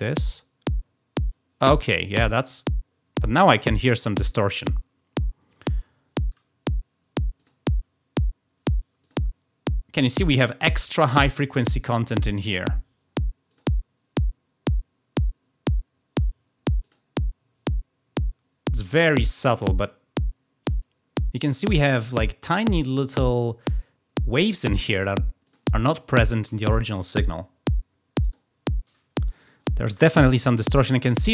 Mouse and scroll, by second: 7.3 click, 8.9 click, 13.4 click, 16.7 click, 18.8 click, 19.7 click, 25.4 click, 28.1 click.